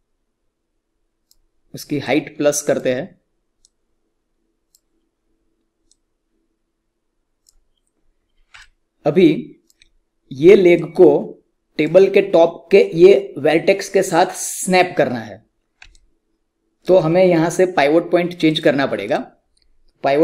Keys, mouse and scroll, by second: 8.6-14.3 alt+drag, 15.8 alt+Num_Lock, 15.8 click, 15.9-18.4 alt+drag.